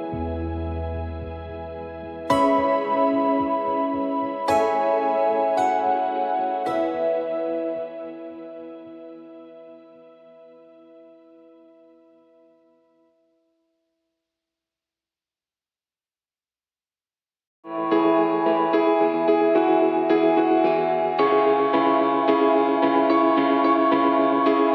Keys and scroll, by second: 0.0-2.0 typing, 4.8-11.8 typing, 16.4-17.2 typing, 17.6 Return, 18.6 v.